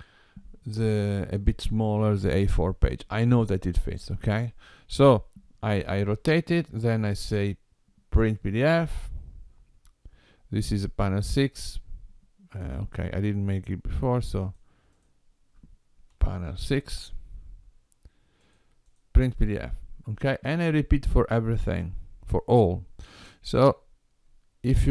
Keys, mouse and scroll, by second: 8.3 click.